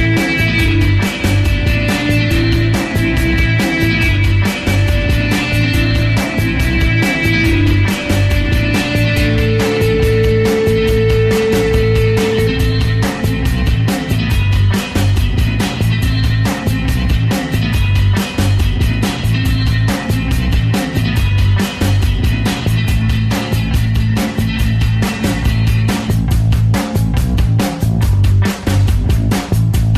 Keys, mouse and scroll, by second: 0.9 f, 1.0-2.0 ctrl+drag, 2.1 alt+shift+click, 2.7 alt+right click, 2.8 alt+middle click, 3.0 alt+click, 3.2 alt+right click, 3.4 alt+middle click, 3.5 alt+click, 3.8 alt+right click, 4.0 alt+click, 4.1 f, 4.3-5.9 ctrl+alt+drag, 5.9 ctrl+z, 6.0 alt+right click, 6.1-7.6 ctrl+alt+drag, 8.8 alt+shift+click, 9.3 alt+right click, 9.5 ctrl+click, 10.0 ctrl+z, 10.3 f, 10.3 ctrl+click, 11.1 ctrl+z, 11.3-13.8 ctrl+drag, 14.1 alt+middle click, 14.3-18.1 alt+drag, 18.3 ctrl+click, 19.3 alt+right click, 19.4 alt+click, 19.6 alt+right click, 19.9 f, 20.2-21.9 ctrl+drag, 21.9 alt+right click, 22.0 ctrl+alt+click, 22.5 ctrl+z, 22.7-24.7 alt+drag, 24.7 alt+middle click, 24.8 alt+click, 25.2 alt+middle click, 25.3 alt+click, 25.7 alt+right click, 25.8 alt+middle click, 25.9-27.4 alt+drag, 27.4 ctrl+z, 27.5 ctrl+z, 27.6-28.8 drag, 28.8 ctrl+z, 28.9-29.9 alt+drag.